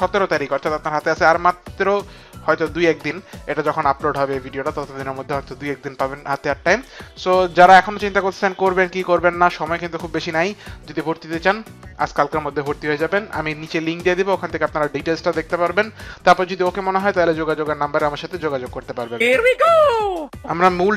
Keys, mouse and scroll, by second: 17.8 click, 18.7 click.